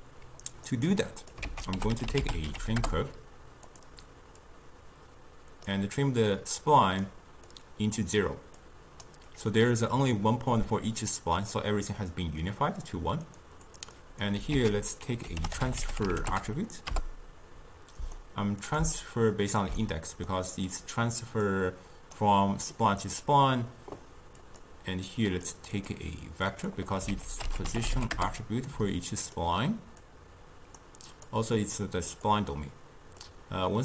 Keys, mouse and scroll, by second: 0.7 click, 0.9 click, 1.6 ctrl+a, 4.5 drag, 6.6-7.7 drag, 8.7 click, 13.3 click, 13.7 click, 14.1-14.7 drag, 14.7 ctrl+a, 18.7-20.4 drag, 20.4-21.6 middle drag, 21.6 click, 24.5 click, 25.8-27.2 drag, 27.2 ctrl+a, 30.2-33.8 drag.